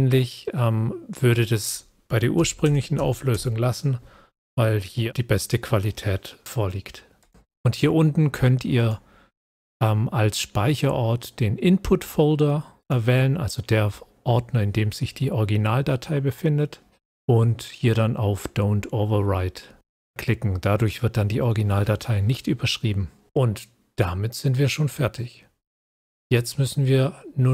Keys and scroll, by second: 2.3-2.9 scroll, 3.3-27.5 scroll up 1.